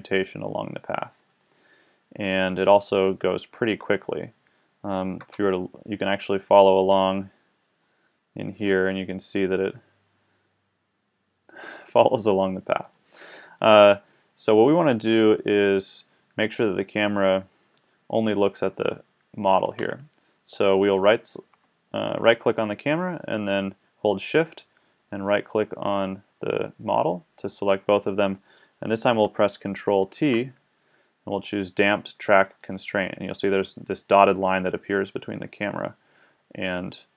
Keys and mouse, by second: 1.3-2.9 middle drag, 5.2 KP_0, 6.9 middle click, 7.6-7.9 drag, 8.0 drag, 12.9-15.2 middle drag, 15.2 KP_1, 16.2-16.6 middle drag, 19.9 a, 20.9-22.9 right drag, 25.0 right click, 30.0 ctrl+t.